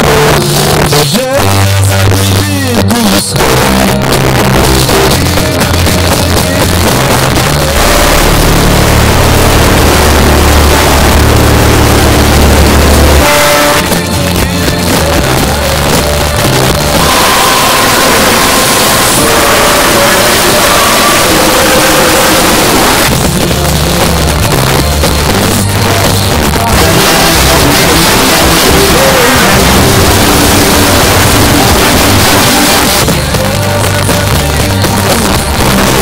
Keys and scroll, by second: 1.9 Down, 2.0 Down, 2.2 Down, 2.5 Down, 2.6 Down, 2.8 Down, 3.0 Down, 3.5 Down, 3.7 Return, 13.7 Page_Down, 23.0 Page_Down, 32.8 Page_Down.